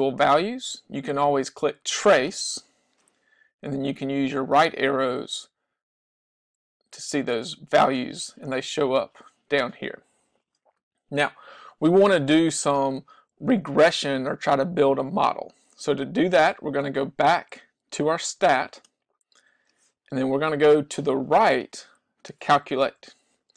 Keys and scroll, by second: 4.2 Right, 5.3 Right, 6.5 Right, 7.4 Right, 23.1 Right.